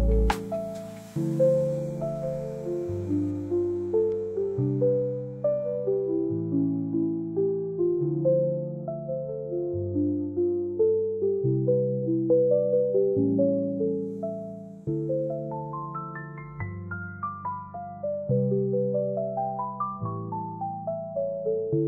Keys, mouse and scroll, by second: 0.2-1.8 drag, 4.5-6.1 drag, 6.8 click, 7.6 space, 10.0 space, 15.8-16.9 drag, 17.5 click, 17.5 space, 18.4-18.9 drag, 19.2 BackSpace, 19.2 space, 19.4 space.